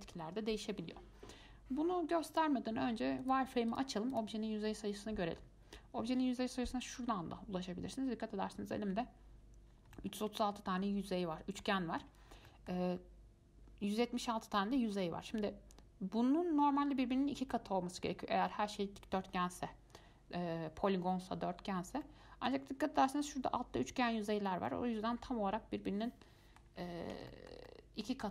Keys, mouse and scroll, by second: 2.5-4.0 drag, 4.3 click, 10.1-15.7 middle drag, 17.7-20.7 middle drag, 22.2-28.3 middle drag.